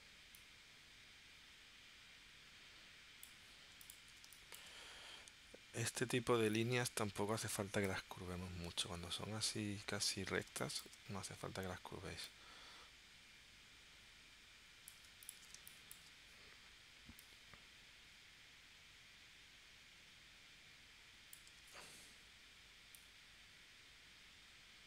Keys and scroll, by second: 4.2 space, 10.5 space, 15.5 space, 21.6 super+z.